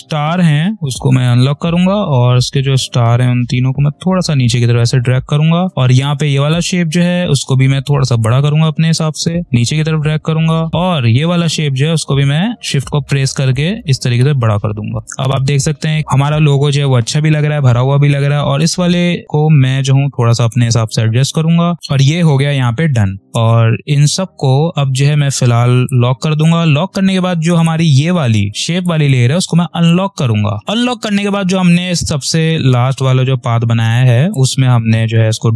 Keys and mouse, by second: 14.4 space, 15.2 space, 16.5 p, 18.5 ctrl+click, 21.7 space, 24.0 click, 28.3 space, 28.4 click, 28.7 space, 29.7 click, 34.2-35.5 drag.